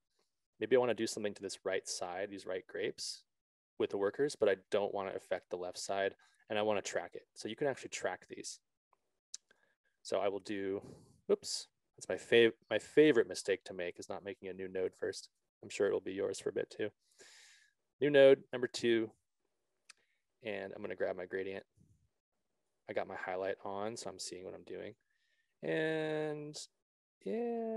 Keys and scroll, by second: 12.0 z, 15.7 alt+s.